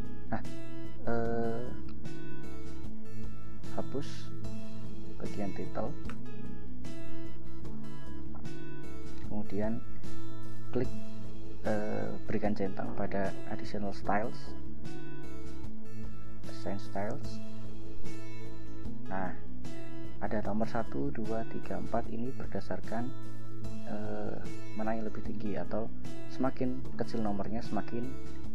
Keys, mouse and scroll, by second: 3.9 click, 4.8 ctrl+a, 6.2 BackSpace, 14.4 click, 16.7 click.